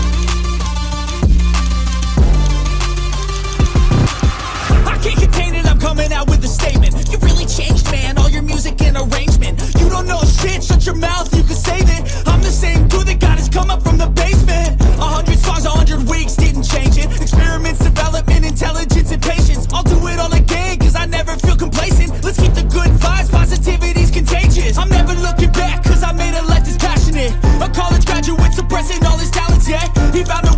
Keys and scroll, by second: 0.0-0.2 typing, 1.6 [, 3.0-4.5 typing, 5.6-8.6 typing, 9.9-19.8 typing, 21.3-25.3 typing, 26.7 typing, 28.0-29.8 typing.